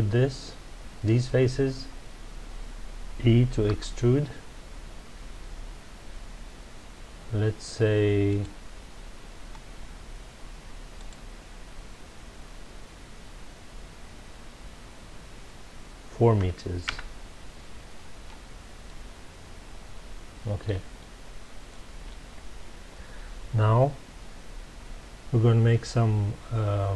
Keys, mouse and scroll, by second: 0.1 scroll down 2, 1.3 scroll up 1, 1.9 scroll down 1, 3.6 e, 8.4 click, 10.9-13.9 drag, 16.9 KP_Enter, 18.8-21.8 middle drag, 21.8-22.3 scroll up 2.